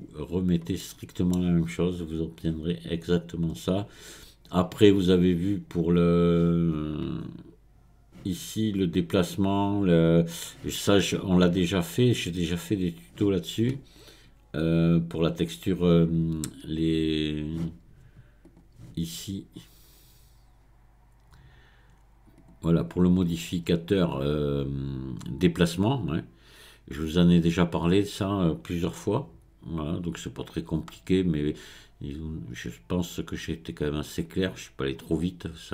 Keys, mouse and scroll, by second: 0.8-3.5 middle drag, 3.5-6.6 drag, 14.5-15.1 scroll up 1, 15.1-17.5 scroll down 2, 17.5-18.2 scroll down 1, 18.4 click, 22.3 click, 23.6-26.8 scroll up 2.